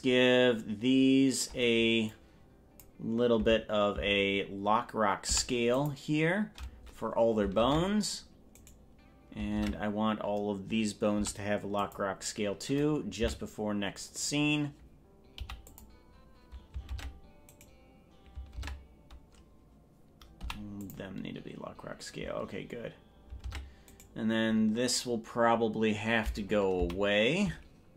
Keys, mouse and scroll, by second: 2.1 click, 3.5 Left, 4.1 Left, 5.3 i, 7.7 ctrl+Tab, 8.7 right click, 9.7 ctrl+Tab, 11.1 i, 13.3 Right, 15.5 i, 17.1 ctrl+Tab, 17.7 right click, 18.7 ctrl+Tab, 20.5 i, 23.5 ctrl+Tab, 24.1 right click, 26.9 Left.